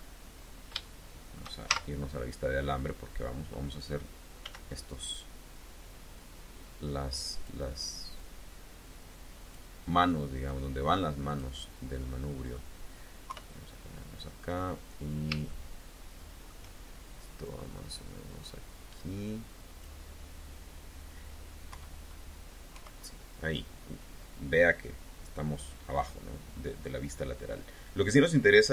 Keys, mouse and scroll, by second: 0.3 scroll down 1, 0.7 shift+click, 1.5 shift+z, 4.3 s, 7.2 click, 8.0-9.5 drag, 10.3-11.4 drag, 11.8 middle click, 13.1 KP_3, 14.8 scroll up 2, 15.3-16.5 shift+drag, 17.3-19.9 drag, 21.5 KP_1, 22.6 KP_3.